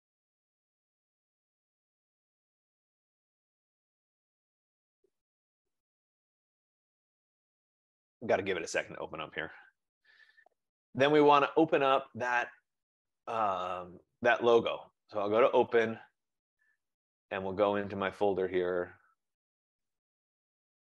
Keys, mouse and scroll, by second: 13.4 click, 15.2 click, 19.8 click.